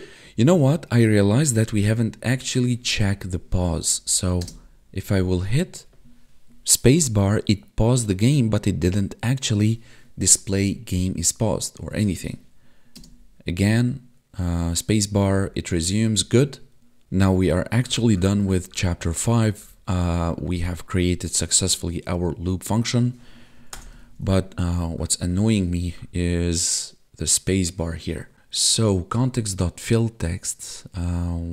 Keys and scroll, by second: 0.2 Right, 1.7 Down, 2.8 Left, 3.1 Up, 3.9 Left, 4.4 space, 13.0 space, 15.3 Up, 16.2 space, 24.0 ctrl+s.